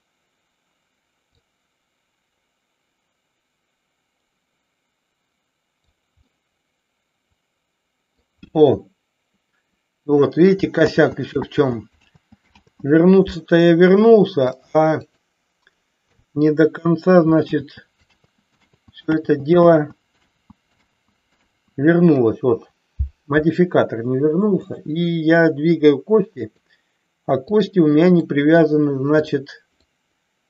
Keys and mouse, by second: 1.3-5.8 drag, 6.3-8.2 middle drag, 10.8 ctrl+z, 11.4 ctrl+z, 11.9 ctrl+z, 12.5 ctrl+z, 14.4-15.2 drag, 17.4 ctrl+z, 18.4 ctrl+z, 18.7 ctrl+z, 19.0 ctrl+z, 19.7 ctrl+z, 20.2 ctrl+z, 20.8 ctrl+z, 21.3 ctrl+z, 26.3-27.7 drag, 28.2 middle click, 29.9 middle click.